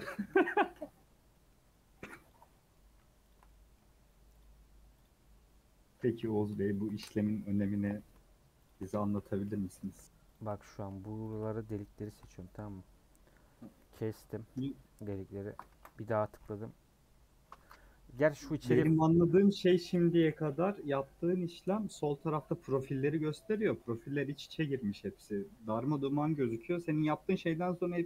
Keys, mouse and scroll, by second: 0.2 KP_Decimal, 0.8-1.3 scroll down 9, 1.3 middle click, 2.3 click, 2.5 middle click, 3.3 shift+click, 3.4 middle click, 4.4 shift+click, 5.0 shift+click, 5.2 shift+middle click, 6.1 shift+click, 6.7 shift+click, 6.9 middle click, 7.5 shift+click, 7.9 middle click, 8.7 shift+click, 8.9 middle click, 9.5 shift+click, 10.3 shift+click, 10.6 middle click, 11.3 shift+click, 11.5 middle click, 12.1 shift+click, 12.4-13.7 middle drag, 15.6 KP_Add.